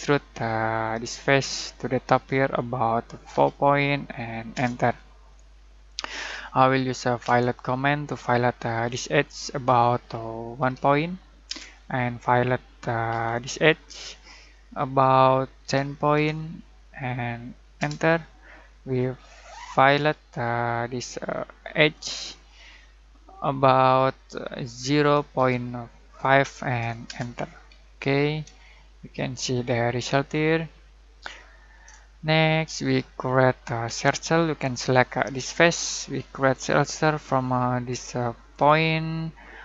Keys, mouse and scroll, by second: 1.0 click, 1.2 click, 3.3 4, 4.5 Return, 5.7-7.2 scroll down 1, 7.2 f, 8.8 click, 10.6 typing, 11.4 Return, 13.1 f, 13.8 click, 14.0 click, 15.6-16.1 typing, 17.8 Return, 19.9 f, 21.7 click, 24.7-26.2 typing, 27.0 Return, 27.9-28.5 middle drag, 33.8 c, 35.1 click, 38.5 click.